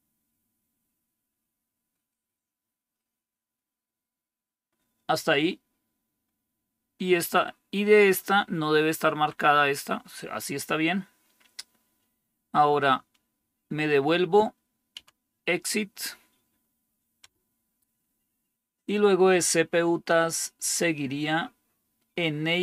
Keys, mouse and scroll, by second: 8.1 Down, 9.0 Down, 14.9 Right, 17.1 Return.